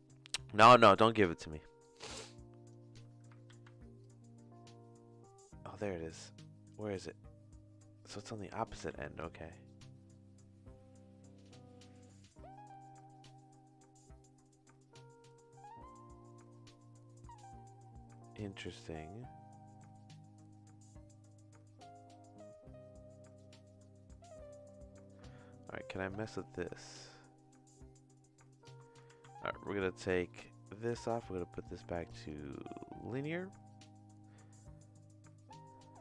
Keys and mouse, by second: 1.8 click, 3.5 ctrl+z, 4.0-8.5 drag, 8.9 ctrl+z, 9.2-24.9 drag, 26.1-28.6 shift+drag, 29.2 ctrl+z, 29.6 middle click, 30.3 middle click, 31.0-33.3 drag.